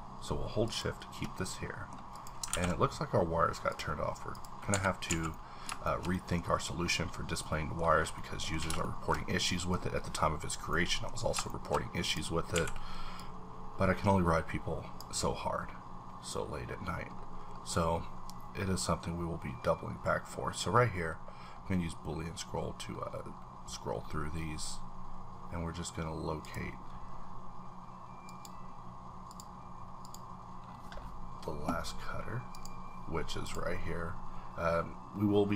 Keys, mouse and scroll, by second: 0.6 shift+click, 1.7 middle click, 2.5 ctrl+`, 3.7 click, 4.2 ctrl+`, 4.3 click, 4.7 Escape, 5.0 a, 5.3 middle click, 5.8-8.8 shift+middle drag, 8.8 shift+middle click, 9.4 shift+middle click, 9.7 scroll up 1, 10.2-10.7 scroll up 1, 10.7 middle click, 11.2 scroll down 1, 12.1 click, 12.5 q, 13.2-16.1 drag, 15.6-18.5 scroll up 11, 18.5-19.0 scroll down 1, 19.0-19.9 scroll up 2, 19.9-20.7 scroll up 1, 20.7-22.2 scroll up 7, 22.7 scroll down 1, 22.9-24.1 scroll up 5, 24.1-25.5 scroll up 6, 25.5-26.4 scroll down 1, 26.4 click, 28.2 click, 29.3 click, 30.0 click, 30.6-32.5 scroll down 5, 32.5 click, 33.4 click, 35.0-35.5 scroll down 2.